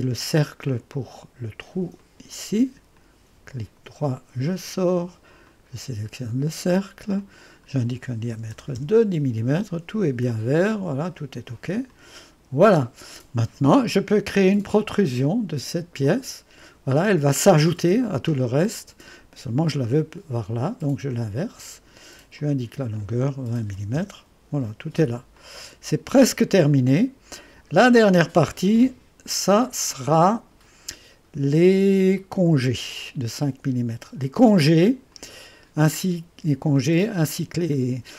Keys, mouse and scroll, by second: 2.0 click, 3.0 click, 4.1-5.5 right drag, 5.5 click, 7.2 click, 8.1-9.2 typing, 11.9 click, 12.4 typing, 16.0 click, 18.3 click, 21.4 click, 22.4 click, 23.4-24.3 typing, 25.4-27.5 drag, 28.1-28.9 scroll up 1, 28.9 click, 29.5-31.4 right drag, 31.4 click, 31.7-33.7 typing, 35.1 click.